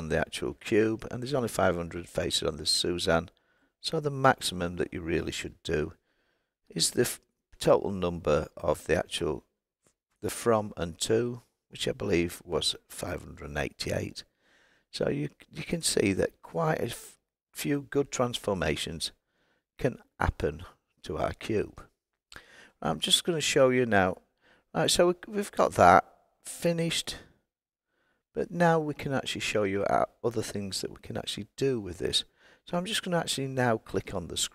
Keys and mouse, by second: 4.3-8.2 drag, 6.8 KP_8.